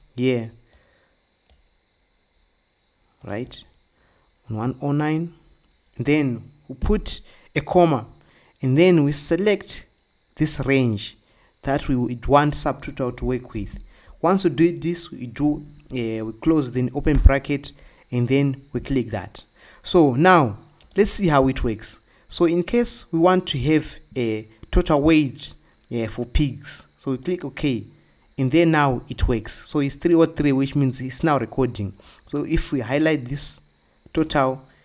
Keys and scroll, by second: 7.5 ', 14.2 shift+0, 17.3 Return.